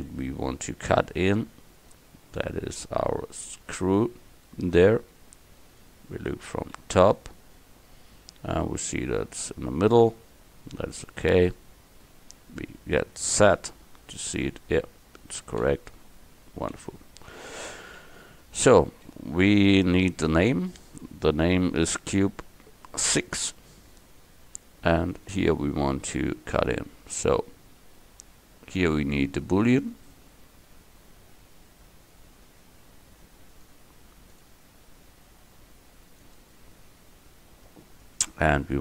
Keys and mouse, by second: 2.8-4.5 drag, 4.5 middle click, 6.8 KP_7, 13.5 z, 15.7 z, 18.0 KP_1, 26.9-36.4 drag.